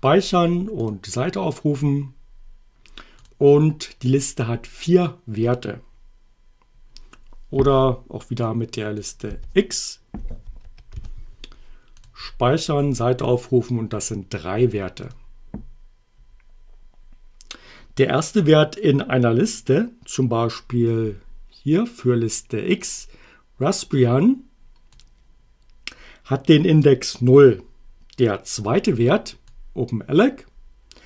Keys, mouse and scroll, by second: 0.8 click, 3.2 click, 8.5 click, 9.3 y, 10.6 BackSpace, 11.0 x, 12.0 click, 13.3 click, 15.1 click, 22.8-25.1 drag, 29.5-31.0 drag.